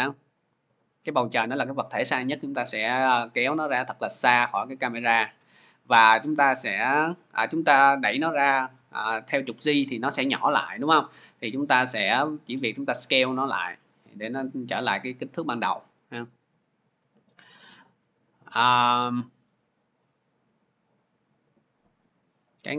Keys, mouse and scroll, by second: 1.3 drag, 2.3-2.6 scroll, 6.9 shift+click, 14.2-14.9 scroll, 15.2-20.1 middle drag, 20.1-22.7 drag.